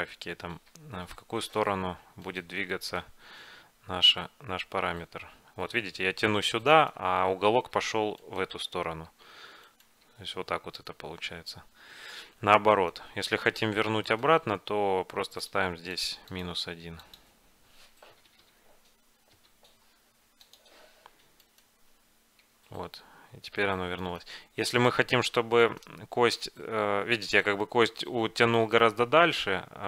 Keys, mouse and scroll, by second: 2.5-4.2 right drag, 2.8-4.2 drag, 4.0 g, 4.2-5.9 middle drag, 9.2 g, 10.2 g, 14.2-16.1 right drag, 15.5-18.4 drag, 18.4 Left, 18.5 Left, 21.6-23.4 right drag, 22.5 g, 24.8 g, 26.3 g, 27.9 g.